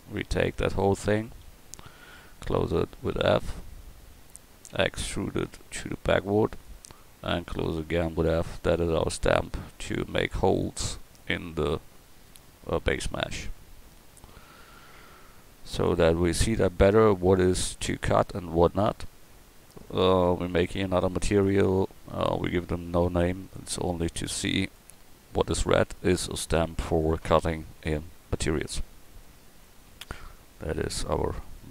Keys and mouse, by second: 0.0 Tab, 1.5 a, 3.2 f, 4.8 e, 6.3 click, 7.7 f, 8.2 Tab, 15.7-19.2 drag, 20.7-26.5 drag, 26.5 a, 27.8 KP_1.